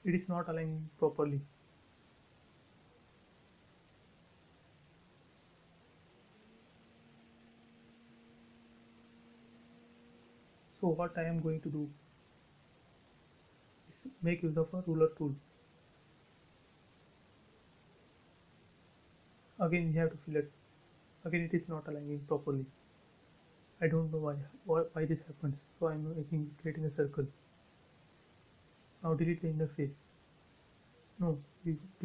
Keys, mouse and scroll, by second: 5.6 scroll down 1, 6.0 scroll up 1, 6.3-8.8 middle drag, 8.8 ctrl+z, 9.3 scroll up 1, 10.5 f, 11.3 space, 11.5 scroll down 1, 12.7 t, 13.6 click, 15.0 Right, 15.9-16.4 scroll up 1, 16.4 click, 16.5 space, 17.2 shift+middle click, 17.9-18.7 scroll up 1, 18.7 f, 19.3 click, 21.2 space, 22.3 Escape, 23.2 c, 24.0 click, 25.0 click, 25.0 space, 25.4-25.7 scroll up 1, 25.7-27.7 middle drag, 27.8-28.1 scroll down 1, 28.1 click, 29.6 scroll down 1, 30.6 scroll up 1, 31.6 middle click, 31.7 middle click.